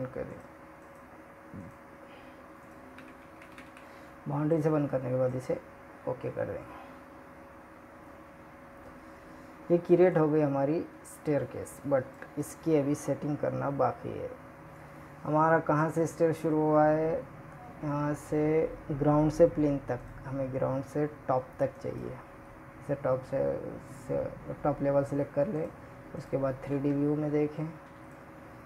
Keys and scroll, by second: 22.7 ctrl+Tab.